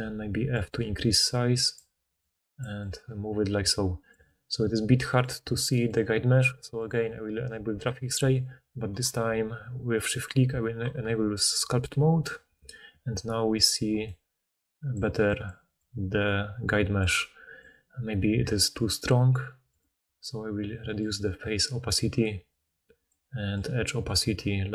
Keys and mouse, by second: 0.6 click.